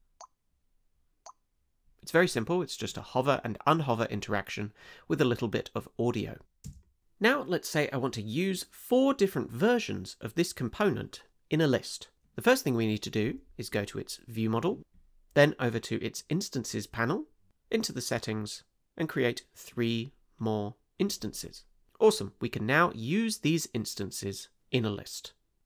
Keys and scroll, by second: 6.7 space.